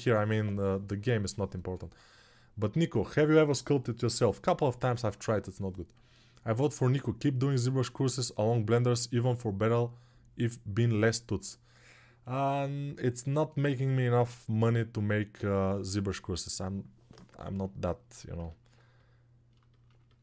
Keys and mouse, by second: 18.1-20.2 ctrl+alt+right drag.